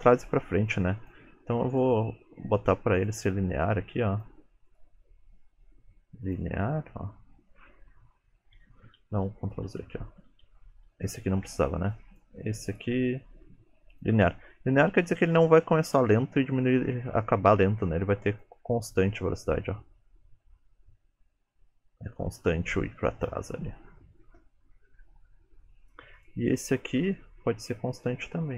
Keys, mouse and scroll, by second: 0.8 click, 1.8 right click, 4.2 click, 4.7 right click, 7.8-8.4 scroll up 5, 9.3 ctrl+z, 9.8 ctrl+z, 10.4 ctrl+z, 11.0 ctrl+z, 12.0 click, 12.8 right click, 17.8 click, 18.8 space, 22.5 space, 23.1 click, 26.2 click, 27.0-27.6 scroll down 2, 27.6 scroll down 4, 27.9 middle click, 28.4-28.5 scroll up 4.